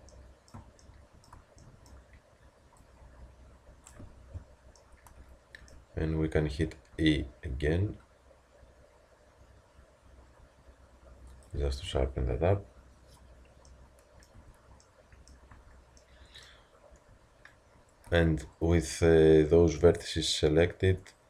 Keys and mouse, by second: 6.9 e, 14.4 Tab, 15.5 Tab, 18.1 z.